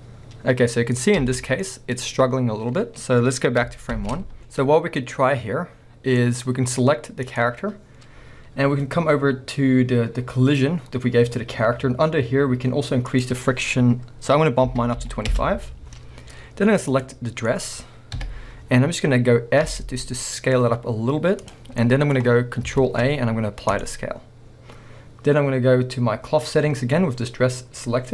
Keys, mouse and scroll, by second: 2.2-3.7 scroll down 1, 4.1 shift+Left, 4.4-7.3 shift+middle drag, 4.6-5.0 scroll up 2, 6.3-7.3 scroll up 2, 7.3 click, 13.1 click, 15.5 Return, 17.3 scroll down 2, 17.5-21.6 middle drag, 18.2 KP_1, 18.7-19.7 scroll up 2, 19.7 s, 21.6 click, 21.8-22.2 scroll, 22.0-28.1 middle drag, 22.8 ctrl+a, 24.5 scroll, 24.6-25.0 scroll up 1.